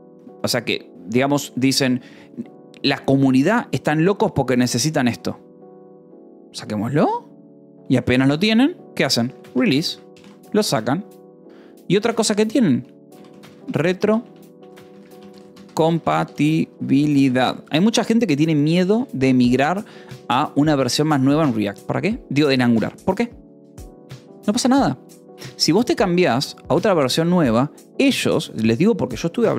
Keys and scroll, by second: 9.3 l, 9.8 Escape, 10.7 ctrl+s, 11.9-18.6 typing, 19.3 Escape, 28.7 shift+v.